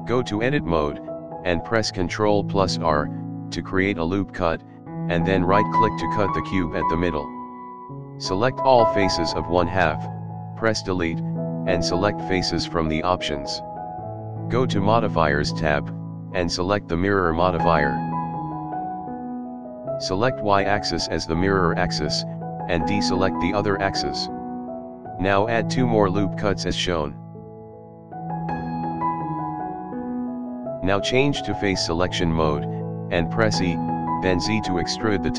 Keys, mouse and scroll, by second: 0.7 click, 2.3 ctrl+r, 5.9 click, 7.1-8.3 drag, 8.7-9.7 middle drag, 10.2 Delete, 11.4-12.5 middle drag, 13.1 click, 13.9-14.2 shift+middle drag, 14.4 scroll up 1, 16.0-19.5 drag, 20.7-22.3 drag, 22.4-23.7 shift+middle drag, 24.1-24.7 drag, 24.9 shift+middle click, 25.2 ctrl+r, 29.7 ctrl+r, 32.1 shift+middle drag, 32.5-33.9 middle drag.